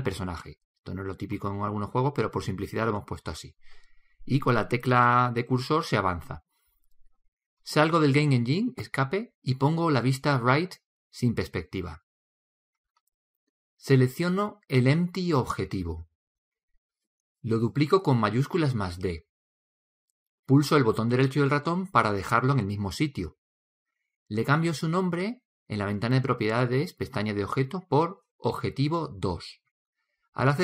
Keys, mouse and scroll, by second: 12.8 KP_3, 13.7-15.7 middle drag, 16.5 right click, 17.0 middle click, 19.5 shift+d, 25.3-27.2 drag, 27.1 BackSpace, 27.5 BackSpace.